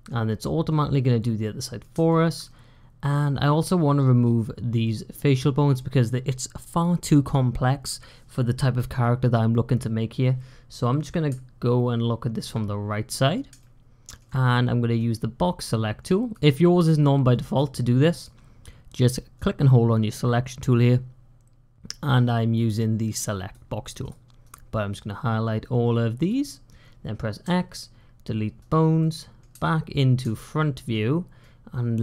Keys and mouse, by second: 1.3 middle click, 2.0 shift+middle click, 2.3-3.8 middle drag, 4.7 middle click, 5.0 click, 5.1 middle click, 5.3 click, 10.7 click, 13.5 shift+click, 14.8-16.2 drag, 16.4-17.4 drag, 17.6 click, 19.4-23.4 drag, 24.3-26.2 drag, 27.3 x, 28.8 middle click, 30.2 shift+middle click, 31.3-32.0 drag.